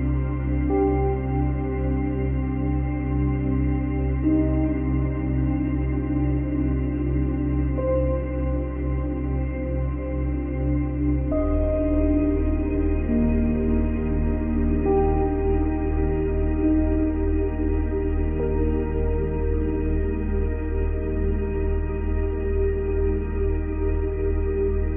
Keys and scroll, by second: 0.7 ctrl+z, 1.5 space, 7.4 space, 10.7 space, 17.9 space.